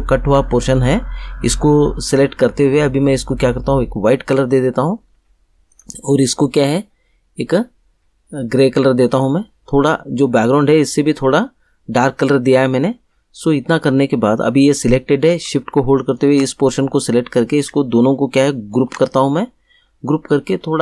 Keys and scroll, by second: 18.7 ctrl+g.